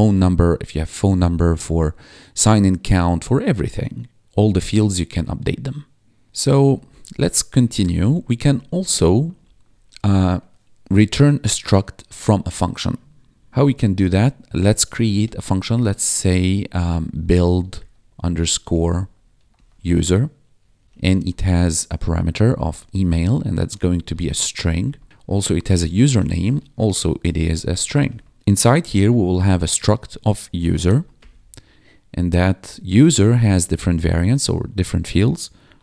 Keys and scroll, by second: 6.7 Return, 7.5 ctrl+Down, 8.3 Up, 9.2 Tab, 9.4 Return, 13.4 ctrl+Down, 14.5-15.4 typing, 16.6-21.6 typing, 23.3-30.8 typing, 31.1 Return, 35.3-35.8 typing.